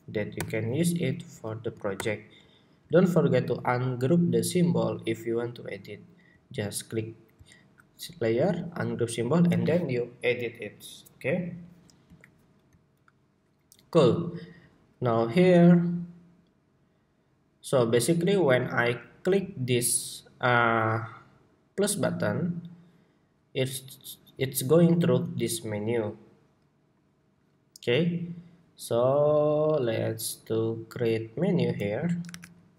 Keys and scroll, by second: 0.8 super+k, 1.7 super+k, 2.5 super+k, 32.0 super+=.